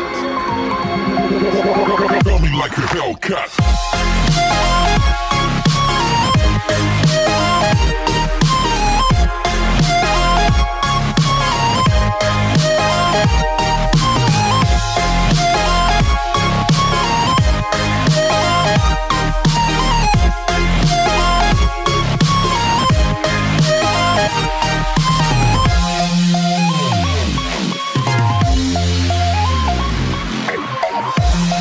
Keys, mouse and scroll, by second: 0.6 click, 1.7 middle click, 3.5 middle click, 3.6 scroll down 3, 9.6 middle click, 16.9 click, 23.0 middle click, 23.7 middle click, 23.8 click, 24.8-25.4 scroll up 3, 25.4 middle click, 26.1 scroll down 2, 26.3 middle click, 27.7 KP_3, 28.9 scroll down 1, 28.9 scroll up 1.